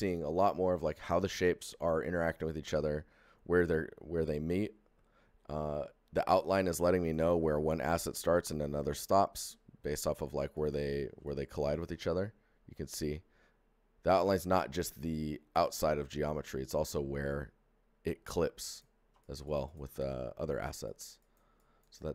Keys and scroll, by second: 12.1 alt+g, 16.4 ctrl+z, 18.7 z.